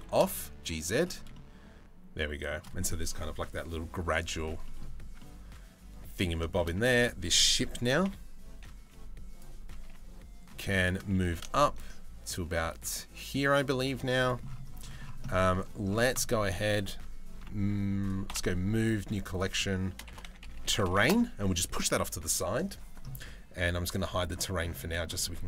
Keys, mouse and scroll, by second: 1.0-2.1 middle drag, 4.3 middle click, 4.8-5.8 middle drag, 6.1 shift+middle click, 6.4 Tab, 7.7 KP_Decimal, 7.7 KP_3, 8.4 z, 9.5 KP_1, 10.5 shift+middle click, 10.8 g, 13.6 z, 14.9 middle click, 17.9 m, 20.2 r, 23.6 middle click, 24.5 middle click.